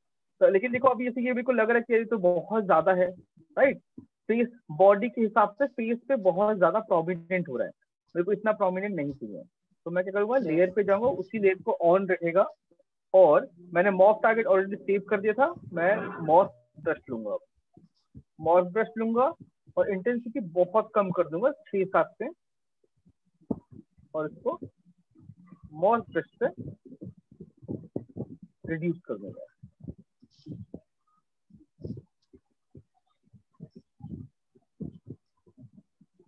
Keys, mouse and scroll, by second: 0.2 alt+click, 3.1 right click, 5.7 click, 6.5 right click, 7.6 right click, 8.2 click, 9.6 click, 9.9 click, 13.7 click, 15.6 click, 17.2 right click, 20.6 click, 27.7 click, 28.0 click, 30.7 click, 31.7 click, 34.1 click, 35.7 click.